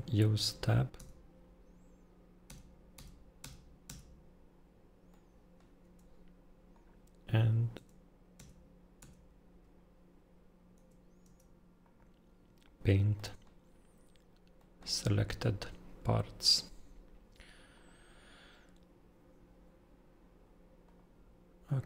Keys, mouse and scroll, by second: 0.3 Tab, 0.9 Tab, 2.4 Tab, 2.9 Tab, 3.4 Tab, 3.8 Tab, 5.1 scroll, 5.8 Tab, 6.7 click, 7.7 Tab, 8.4 Tab, 8.9 Tab, 9.7-10.7 scroll, 10.7 Tab, 11.2 Tab, 11.8 click, 13.1 middle click, 14.5 middle click, 17.0 scroll, 17.7 click, 20.8 click.